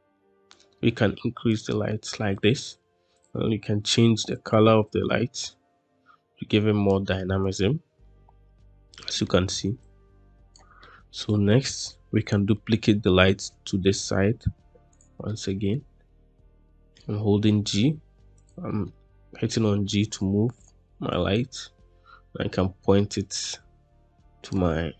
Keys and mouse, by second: 0.6 s, 1.8 middle click, 7.9-9.7 middle drag, 10.7-11.4 middle drag, 11.8-12.4 shift+middle drag, 13.2 shift+d, 15.2-15.6 middle drag, 15.9 f, 16.7 g, 18.3 click, 18.8-20.0 middle drag, 19.2-19.7 drag, 21.0 click, 21.8-24.4 drag.